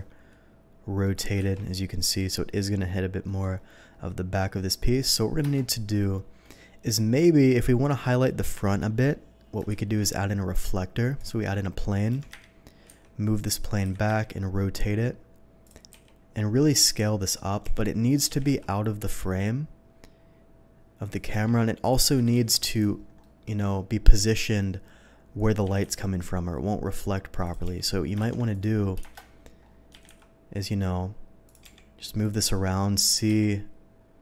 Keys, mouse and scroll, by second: 1.5 ctrl+z, 2.2 middle click, 3.3 middle click, 4.3 middle click, 5.5 KP_0, 9.7 shift+a, 11.2 click, 12.1-14.1 typing, 13.4 click, 15.6 click, 15.9 s, 17.2 click, 17.6 g, 18.1 click, 18.3 r, 18.4 z, 21.1 click, 21.3 g, 21.8 click, 22.2 r, 22.4 z, 22.7 click, 23.2 middle click, 25.4 middle click, 25.7 r, 25.9 z, 27.4 click, 27.6-30.2 typing, 28.5 click, 31.5 click, 31.8 g, 32.2 click, 32.5 middle click, 33.3 s.